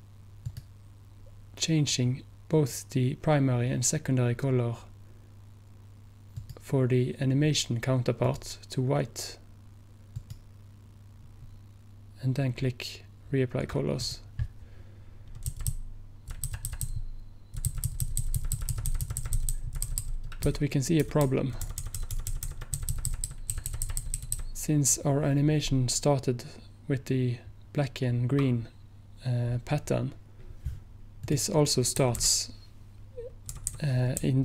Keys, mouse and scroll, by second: 6.4 click, 9.9 click, 14.1 click, 15.6 Left, 15.7 Left, 16.3 Left, 16.3 Left, 31.3 click, 32.1 Right, 32.1 click, 32.3 Right, 33.6 Right, 33.7 Right, 34.3 Right.